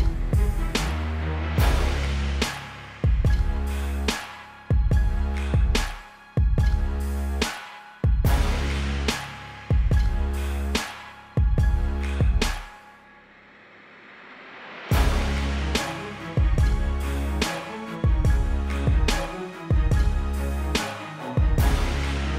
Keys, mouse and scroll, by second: 3.4 z, 3.8 click, 15.1 click.